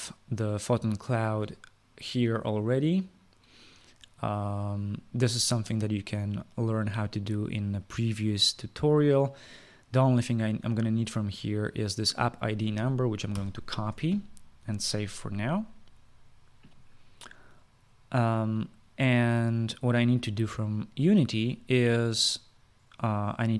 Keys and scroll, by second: 14.0 ctrl+c.